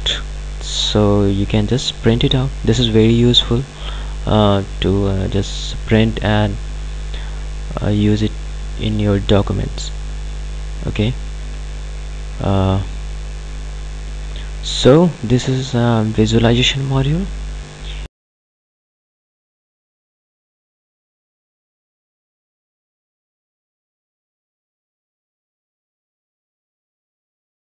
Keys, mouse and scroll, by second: 1.5 click, 9.7 click.